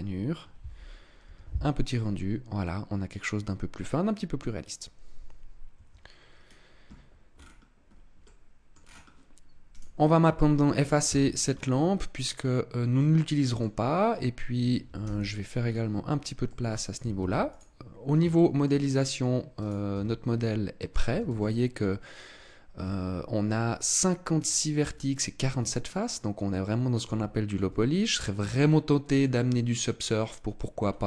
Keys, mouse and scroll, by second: 5.7 Escape, 6.3-7.2 scroll down 2, 7.2-7.6 scroll down 5, 7.8-8.1 scroll up 2, 8.1 middle click, 8.7-9.1 scroll down 2, 9.7 right click, 11.1 x, 12.1 middle click, 14.9 t, 15.5-16.4 scroll up 1, 16.4 middle click, 16.4 scroll up 2, 17.2 ctrl+s, 18.3 shift+middle click, 18.8 middle click, 19.5 right click, 19.9 Tab, 20.4 middle click, 21.0 a, 21.2 a, 22.7 Tab, 25.4 middle click, 26.4 middle click, 27.0 Tab, 27.5 Tab, 28.1 middle click, 29.5 middle click, 30.7-31.0 scroll up 3.